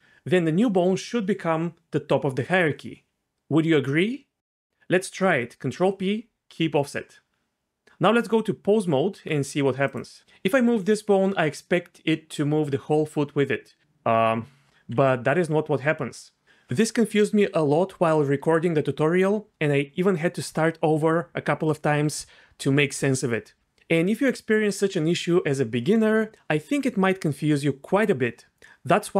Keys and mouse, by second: 5.6 ctrl+p, 8.2 Tab, 10.2 g, 10.6 g, 14.9 g.